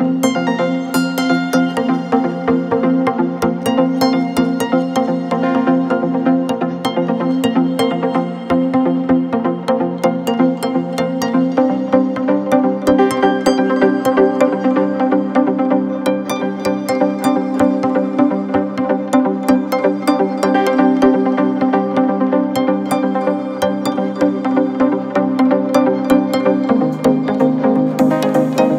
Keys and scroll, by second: 0.1 space, 2.5 ctrl+=, 2.9 space, 3.6 ctrl+=, 5.5 ctrl+-, 5.9 space, 8.4 space, 9.2 space, 10.0 ctrl+=, 10.4 space, 13.7 space, 14.3 ctrl+z, 15.9 space, 19.9 space, 22.4 space, 24.3 ctrl+z, 24.9 ctrl+z, 26.9 space, 27.9 ctrl+z.